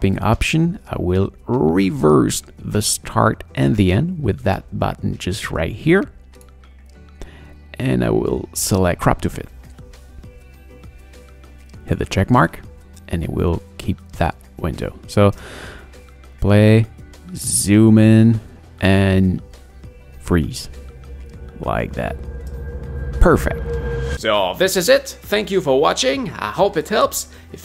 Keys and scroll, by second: 15.4 space, 22.4 space.